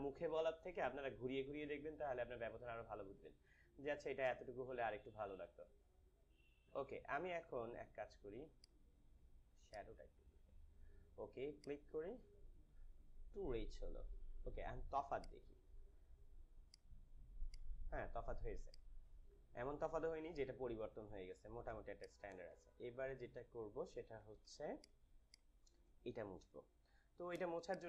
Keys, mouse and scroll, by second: 8.6-11.4 drag, 15.2 click, 21.0 ctrl+-, 21.0 ctrl+click, 21.4 ctrl+-, 21.8 space, 22.0 click, 22.4 space, 23.0 ctrl+=, 24.5 space, 24.7 click, 25.0 space, 25.2 click, 25.3 space, 25.8 space, 26.8 =, 27.4 space, 27.7 click.